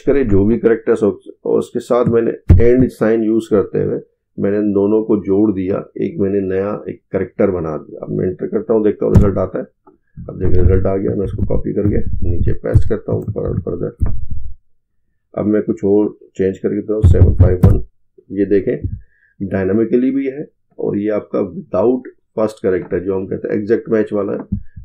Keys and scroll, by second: 11.1 ctrl+c, 13.4 ctrl+v.